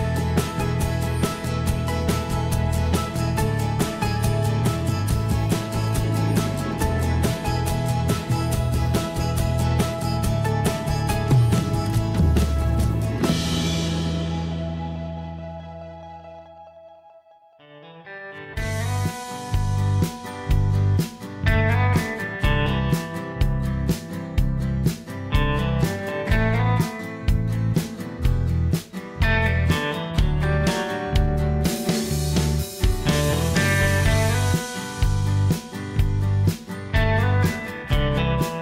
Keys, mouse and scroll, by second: 4.7 ctrl+s, 10.1 m, 12.3 space, 15.8 F2, 16.2 typing, 28.1 l, 29.2 m, 31.9 s, 38.0 m.